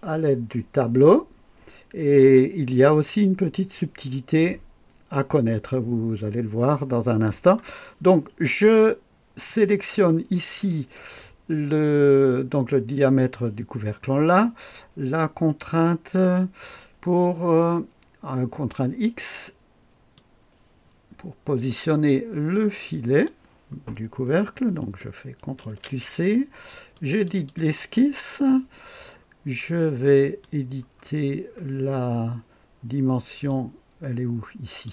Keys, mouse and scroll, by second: 9.5 click, 20.2-23.3 drag, 25.6 ctrl+c, 26.9 click, 27.4 click, 27.6 click, 29.2-30.5 scroll down 1, 31.1-33.5 scroll down 1, 33.5-34.9 drag.